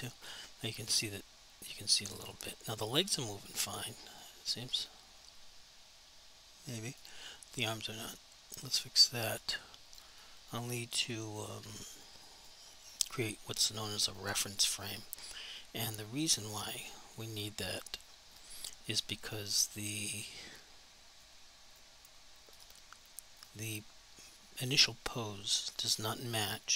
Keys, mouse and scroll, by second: 0.2 alt+click, 0.9 click, 4.2 click, 5.0 alt+click, 7.4 alt+click, 9.0 alt+click, 9.5 alt+click, 10.3 alt+click, 10.8 alt+click, 11.2 alt+click, 11.7 alt+click, 12.3 alt+click, 12.8 alt+click, 13.2 alt+double click, 13.6 alt+click, 14.0 alt+click, 14.4 alt+click, 18.3 click, 21.2 click, 21.3 click, 22.6 click.